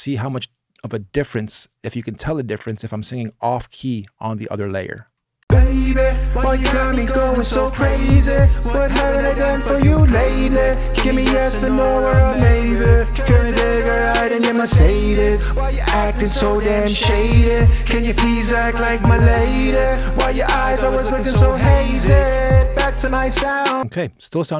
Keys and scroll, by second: 5.2 space.